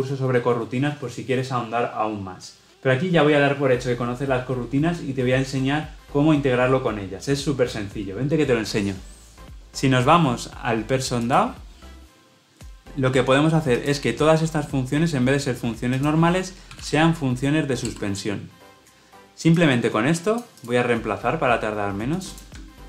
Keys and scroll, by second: 17.8 Return.